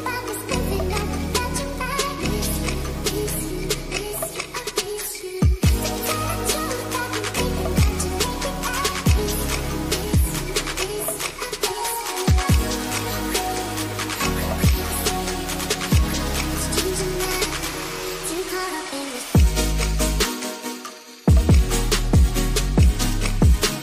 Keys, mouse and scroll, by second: 0.9 shift+a, 5.3 click, 6.4 click, 9.4 click, 13.1-14.2 drag, 17.0-17.7 middle drag, 18.6 middle click, 19.8-20.2 middle drag, 20.8 middle click, 21.9 click.